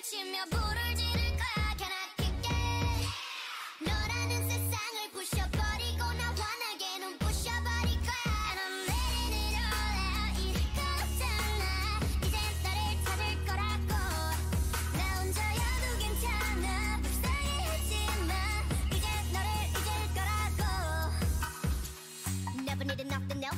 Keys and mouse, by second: 1.5 ctrl+e, 3.0 a, 4.1-5.8 drag, 5.0 u, 6.6 a, 7.2-8.3 drag, 10.8 ctrl+e, 12.2-14.2 typing, 16.1 a, 17.3-19.0 drag, 17.8 a, 18.2 a, 18.5 l, 19.0 r, 20.1 r, 20.9 r, 21.9 l, 22.4 g.